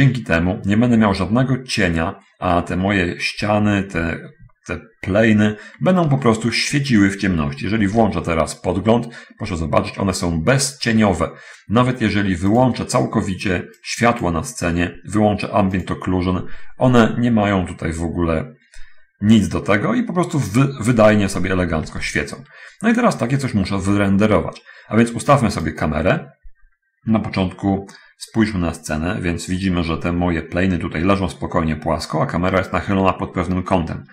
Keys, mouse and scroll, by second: 4.2 7, 6.6 shift+middle click, 8.1 shift+z, 12.9 click, 14.0 click, 16.1 click, 22.0 shift+z, 25.9 right click, 28.2-29.4 middle drag, 29.6-30.7 middle drag, 32.8-34.1 scroll up 1.